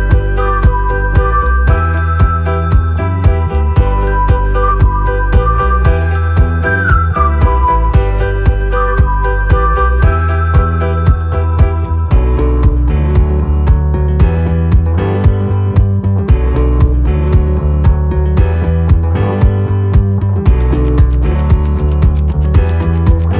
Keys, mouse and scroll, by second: 0.6-3.1 typing, 4.3-7.7 typing, 8.9 click, 12.1 alt+scroll down 1, 12.6 space, 12.7 click, 14.8 space, 16.6 click.